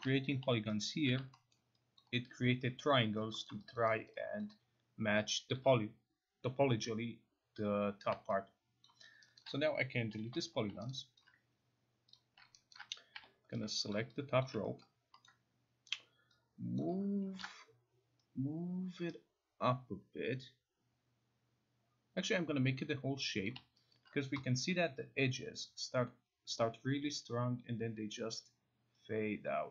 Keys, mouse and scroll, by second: 0.9 alt+click, 1.5 alt+middle click, 2.0 alt+click, 3.2 alt+click, 3.5 alt+middle click, 4.1 alt+click, 4.4 alt+right click, 5.1 alt+click, 5.5 alt+click, 8.1 alt+click, 8.6 alt+click, 8.9 alt+click, 9.4 alt+middle click, 9.4 alt+click, 10.1 Delete, 10.9 alt+right click, 11.2 alt+click, 12.2 click, 12.7 alt+right click, 13.2 0, 13.9 click, 14.5 alt+click, 14.8 middle click, 15.3-15.9 scroll, 16.8 click, 17.4 ctrl+z, 23.5 click, 23.9 alt+right click.